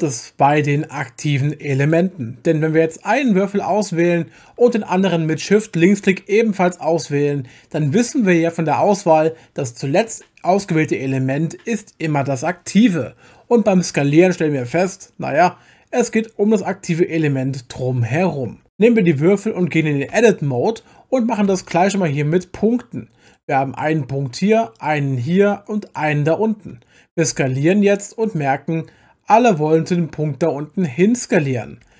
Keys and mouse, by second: 0.0-1.9 drag, 3.2 click, 5.8 shift+click, 14.7 s, 18.5 Escape, 20.1 Tab, 21.5 1, 23.3 click, 24.8 shift+click, 25.9 shift+click, 27.3 s, 31.8 Escape.